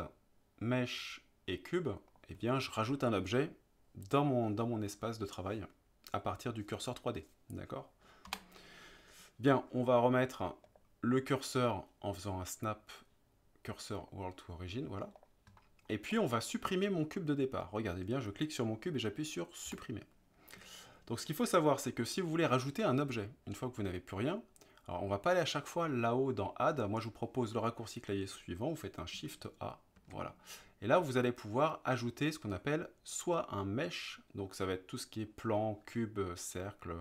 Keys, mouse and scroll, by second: 0.1-2.2 drag, 8.3 Delete, 10.7-12.2 right drag, 12.3-14.1 right drag, 15.2 click, 15.6-15.9 middle drag, 16.2 click, 19.7 Delete, 30.0 shift+a.